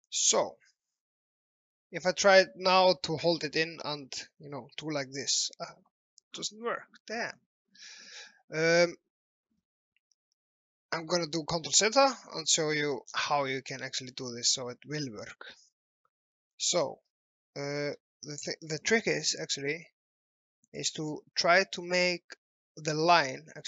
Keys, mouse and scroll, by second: 0.1 click, 8.2 right click, 9.2 Escape, 10.2 ctrl+z, 10.9 alt+middle click, 11.8 ctrl+z, 12.4 typing, 12.9 scroll up 1, 13.3 scroll down 1, 13.9 alt+middle click, 16.6 scroll down 1, 17.2 alt+middle click, 18.1 ctrl+z, 19.4-20.1 typing, 20.7 click.